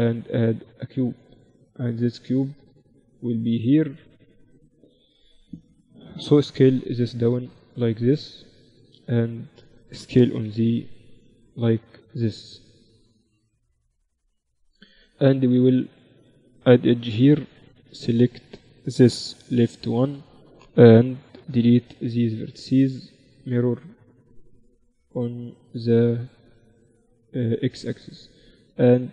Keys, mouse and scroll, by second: 3.1-4.7 drag, 6.6 s, 10.5 s, 14.3 Tab, 15.5 ctrl+r, 16.4 a, 18.0-20.0 drag, 18.4 a, 18.7 a, 19.6 b, 22.0 x, 22.8-24.6 drag, 27.0-28.9 drag, 28.9 middle click.